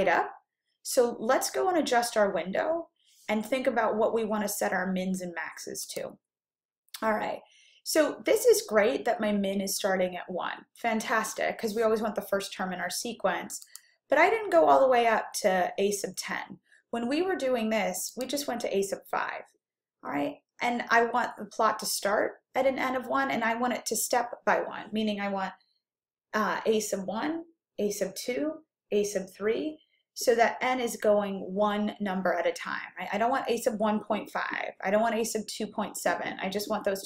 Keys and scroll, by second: 13.7 Down, 18.2 5.